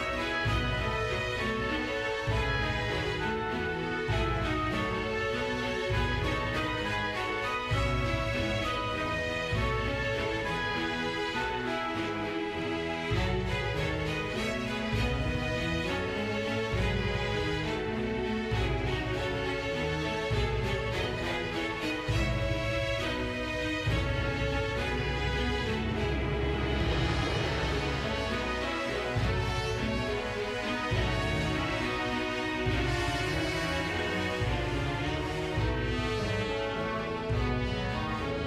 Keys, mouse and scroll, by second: 0.6 click, 1.3 click, 2.3 g, 2.8-3.4 drag, 4.0 space, 6.0 space, 6.2 space, 9.0 space, 9.3-9.7 scroll down 6, 9.7 middle click, 9.8-10.2 scroll up 4, 10.0 shift+middle click, 10.2-10.8 drag, 11.2 shift+middle click, 11.8 scroll up 3, 11.9 shift+middle click, 12.5 click, 14.6-15.8 middle drag, 17.5 right click, 17.9 a, 21.1 space, 21.4-25.0 drag, 25.4 click, 26.6-28.3 right drag, 28.3 space, 28.4-30.6 drag, 32.8 click, 33.2 i, 36.4-38.1 drag.